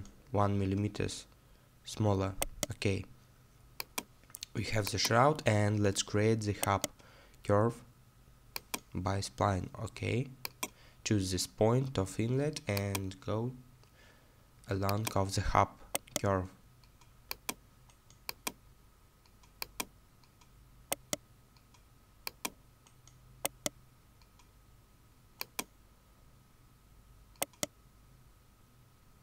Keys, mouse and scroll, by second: 2.0-2.4 scroll down 1, 2.4 right click, 6.6 right click, 13.1-13.5 scroll down 1, 16.0 right click, 20.1 right click, 20.1-20.9 scroll down 1, 20.9 right click, 25.8 scroll down 1, 27.4 right click.